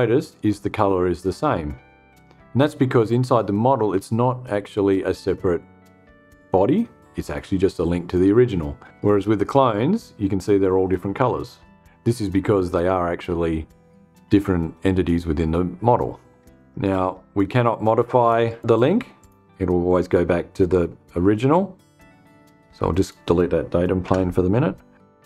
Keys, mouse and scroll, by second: 17.9 click, 18.6 click, 22.4 click, 23.5 Delete.